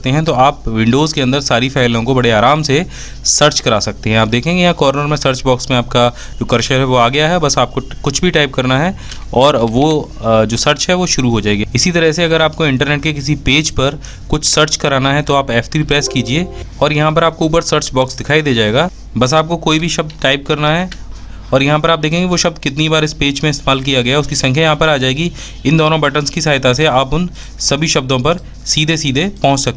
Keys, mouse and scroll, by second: 10.7 f, 11.8 F3.